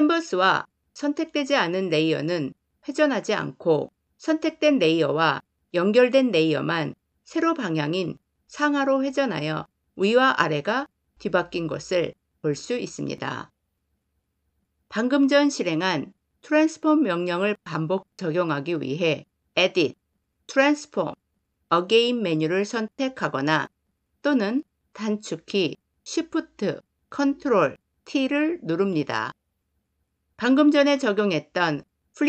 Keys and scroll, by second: 19.4 ctrl+shift+t.